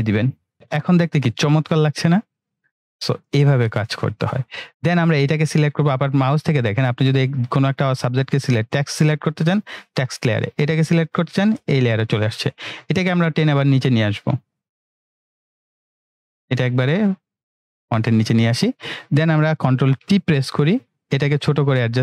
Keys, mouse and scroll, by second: 13.2-14.4 drag, 14.7-16.6 scroll down 1, 16.8-18.0 drag, 20.2 ctrl+t, 21.4-22.0 click.